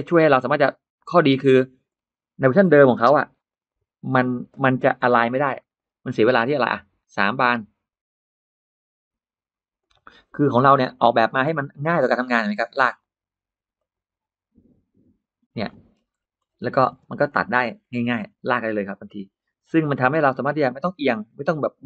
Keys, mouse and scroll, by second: 1.3 click, 1.7 middle click, 2.8 p, 3.3 click, 3.5 click, 3.9 space, 4.0 middle click, 4.6 middle click, 4.6 Escape, 4.8-5.9 scroll down 3, 4.9 Escape, 5.0 middle click, 5.4 middle click, 9.6 click, 11.0 click, 11.3 middle click, 11.6-12.0 scroll down 2, 12.0-12.3 scroll up 2, 12.7 click, 13.6 click, 15.5 middle click, 15.9-16.3 scroll up 1, 16.3 scroll down 1, 16.7-17.0 scroll up 1, 16.8 space, 17.1 click, 17.3 click, 17.6 middle click, 17.7 scroll down 1, 17.8 middle click, 18.5-19.4 scroll up 4, 19.5 r, 20.6 click, 20.9 middle click.